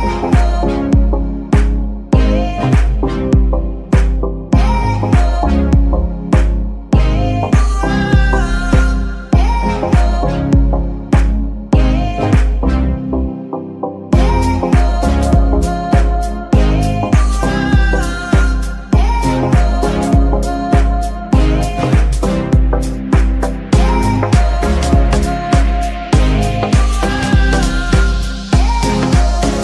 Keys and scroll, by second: 2.5 g, 6.7 Escape, 23.4 e, 28.4 shift+g, 28.5 shift+z.